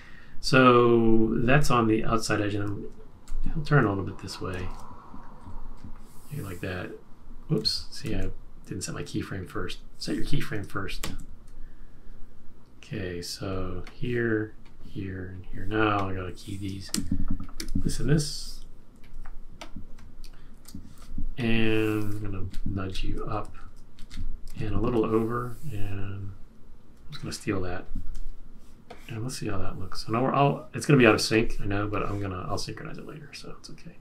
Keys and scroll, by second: 3.2 shift+Right, 4.7 shift+Down, 5.0 Up, 5.3 Up, 5.7 Up, 7.6 super+z, 8.2 super+z, 11.0 super+z, 16.9 F6, 20.5 shift+F6, 22.4 shift+Up, 22.8 shift+Up, 23.2 Down, 24.1 Up, 24.5 shift+Right.